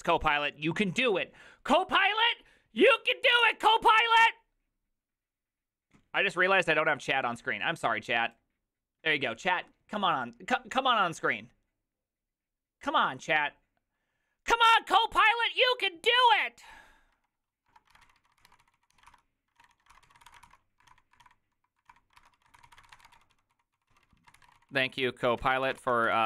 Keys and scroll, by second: 17.8-26.2 typing, 19.6 ctrl+a, 19.8 ctrl+a.